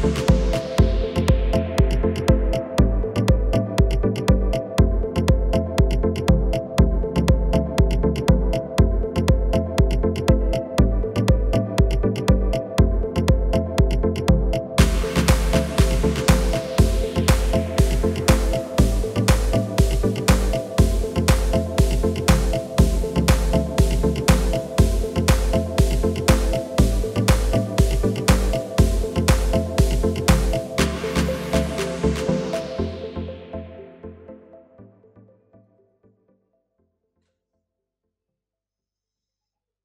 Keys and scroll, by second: 31.8 KP_1.